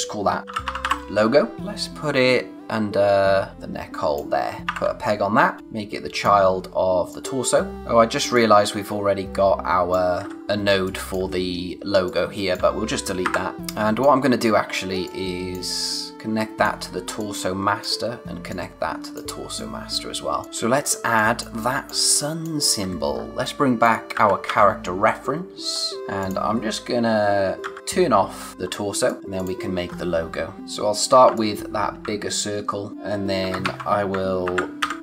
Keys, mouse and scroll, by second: 0.2-1.5 typing, 3.5 click, 4.6 ctrl+p, 5.4 scroll down 1, 5.6 click, 7.7 space, 8.3 click, 10.4 scroll up 1, 10.6 space, 10.8 click, 11.1 space, 12.0 click, 13.5 space, 13.6 click, 13.9 space, 14.3-14.8 scroll up 1, 14.8 space, 15.0 click, 15.3 space, 16.1 click, 19.4 space, 19.5 click, 19.9 space, 20.4 click, 20.4-20.9 scroll down 1, 20.9 space, 21.1 click, 21.4 space, 22.8-23.4 scroll up 1, 23.4 click, 23.9-24.9 typing, 25.3-25.7 scroll down 1, 25.7-26.1 scroll up 1, 27.6 d, 28.3 scroll up 1, 28.5-28.9 scroll down 1, 28.9 space, 29.0 click, 29.2 scroll up 1, 29.3 click, 29.8-30.6 scroll up 1, 31.2 alt+Num_Lock, 31.3 alt+click, 33.4 ctrl+c, 33.6 ctrl+v, 34.4 shift+Up, 34.8 shift+Left.